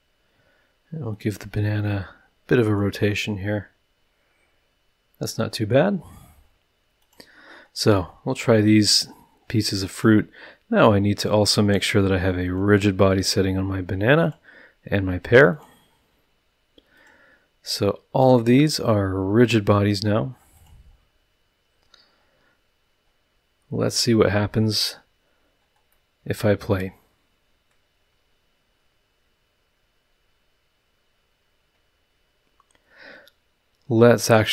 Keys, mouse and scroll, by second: 1.1-3.0 drag, 3.1-4.5 middle drag, 4.5-4.9 drag, 4.9-6.0 middle drag, 7.0 click, 8.0 middle click, 9.9 click, 12.4 click, 14.2 click, 15.5 click, 16.9 click, 17.6 click, 19.4 click, 20.5 click, 20.9-21.5 scroll down 2, 21.7-22.4 scroll up 2, 25.9-27.4 middle drag, 27.4 click.